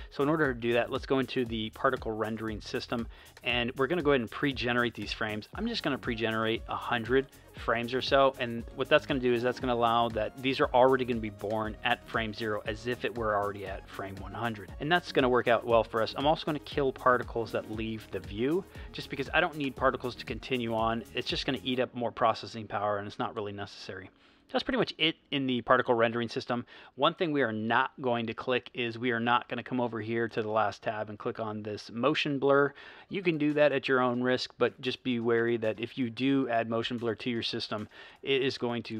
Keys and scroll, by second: 11.7 space, 14.9 space.